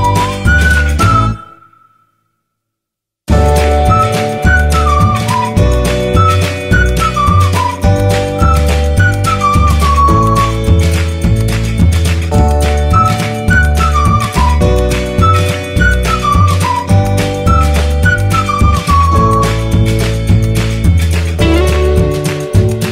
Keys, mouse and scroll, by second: 1.0 click, 5.8 typing, 7.3 typing, 13.4 8, 17.1 b, 20.6 click.